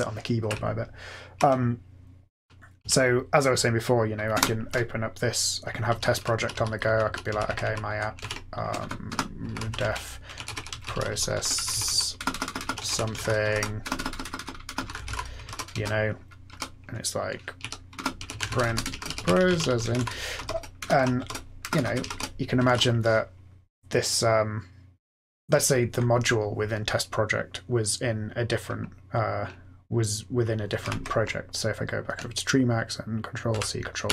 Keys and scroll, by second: 0.5 Up, 1.0-1.4 Up, 1.4 Down, 1.9 Down, 2.0-2.6 Down, 2.7 Down, 4.3 Return, 5.8 Down, 6.1 Up, 6.3 Down, 6.5 Down, 6.6 Down, 6.8 Down, 7.3 Up, 7.4 Up, 7.6 Up, 8.1 ctrl+e, 8.6 Return, 8.7 Return, 9.0-16.2 typing, 16.4 Return, 17.3-23.4 typing, 22.5 ctrl+x, 22.6 ctrl+s, 30.8 ctrl+F8, 33.4 ctrl+c, 34.0 ctrl+p.